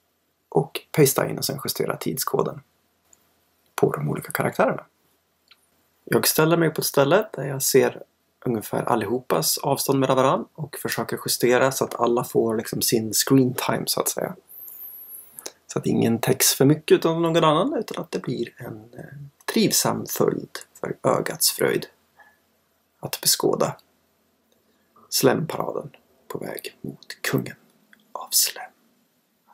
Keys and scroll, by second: 0.0 super+v, 6.6 Delete, 12.5 Delete, 13.2 Delete, 18.1 Delete, 25.8 Delete.